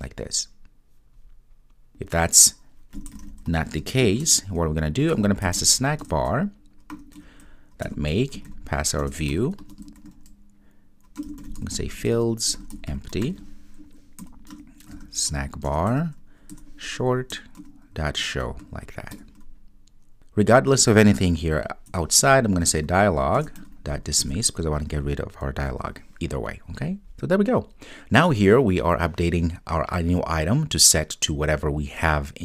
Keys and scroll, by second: 6.1 Return, 14.6 Return, 23.5 Return, 24.3 Return, 25.8 super+s.